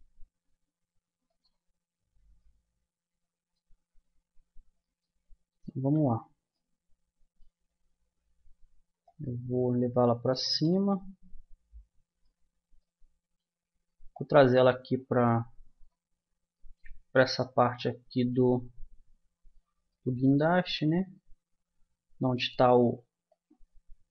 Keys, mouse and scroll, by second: 0.0 b, 0.0 g, 1.8-3.8 middle drag, 6.0 z, 8.4 middle click, 9.4-10.8 drag, 11.0-12.0 middle drag, 14.1-15.7 middle drag, 16.1-19.0 middle drag, 19.0 click, 19.9 middle click, 20.2-21.5 drag, 23.2-24.1 drag.